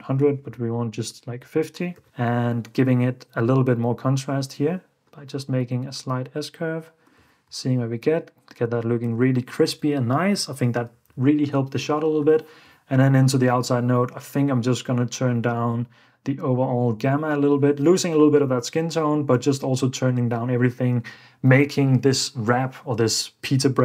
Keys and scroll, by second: 0.0-4.0 typing, 0.9 Return, 9.2 super+f, 9.7 super+d, 10.6 ↺, 11.2 super+s, 18.9 super+f, 19.6 super+d.